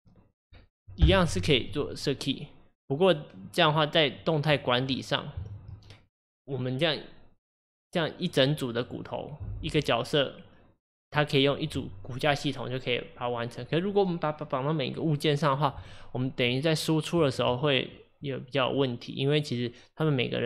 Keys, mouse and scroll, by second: 1.7-4.3 drag, 4.7 shift+click, 6.1 ctrl+click, 15.8 click, 16.6 click, 17.4 shift+click.